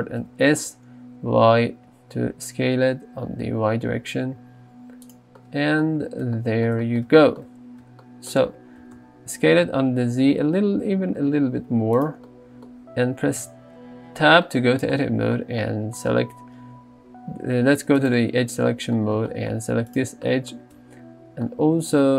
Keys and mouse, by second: 0.2 s, 0.6 y, 8.8 s, 9.0 z, 13.4 Tab.